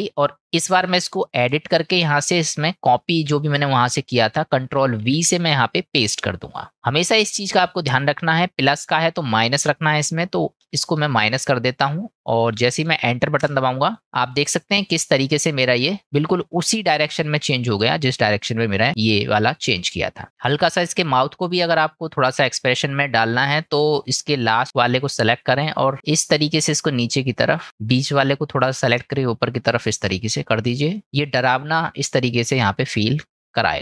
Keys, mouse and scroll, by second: 1.4-14.0 drag, 29.0 click, 30.2 click, 31.0 middle click.